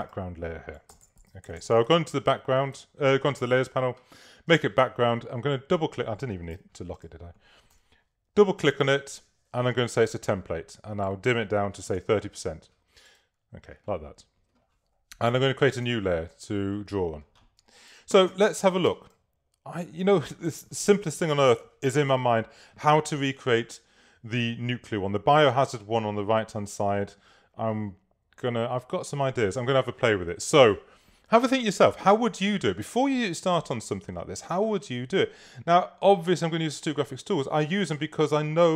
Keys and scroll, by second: 0.8-2.8 typing, 4.6 Return, 6.6 l, 7.8 v, 11.7-12.5 typing, 18.2 super++, 19.0 super+space.